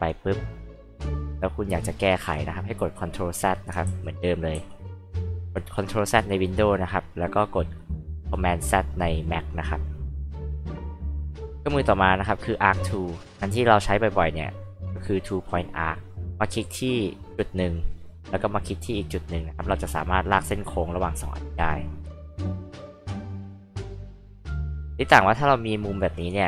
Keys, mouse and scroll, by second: 0.2 click, 1.0 click, 1.8 click, 3.8 ctrl+z, 4.5 ctrl+z, 5.4 ctrl+z, 10.1 h, 10.4 click, 13.3 click, 14.0 click, 14.7 click, 15.5 click, 17.3 click, 19.5 click, 19.7 click, 23.1 click, 24.3 click, 24.5 click.